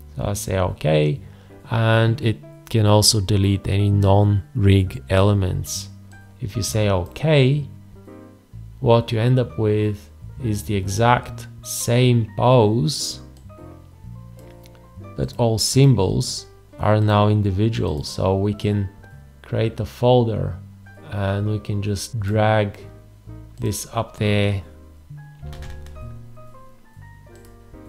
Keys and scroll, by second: 25.5 alt+z.